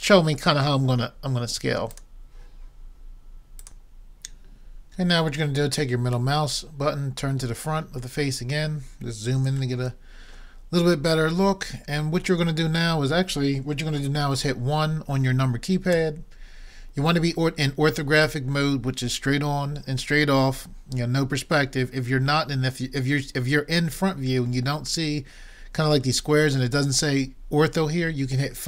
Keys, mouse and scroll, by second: 3.6-6.4 drag, 3.6-8.3 middle drag, 3.6-6.4 right drag, 8.9-9.8 scroll up 1, 9.8-12.8 middle drag, 16.0 KP_1.